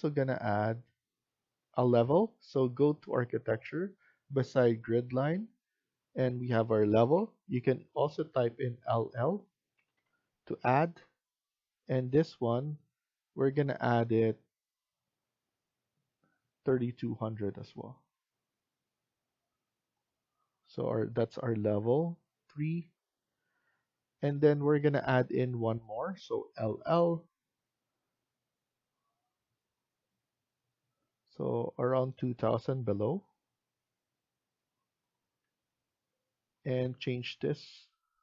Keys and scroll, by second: 9.8 l, 22.6 Escape, 23.5 Escape, 26.7 l, 26.9 l, 35.3 Escape, 35.6 Escape.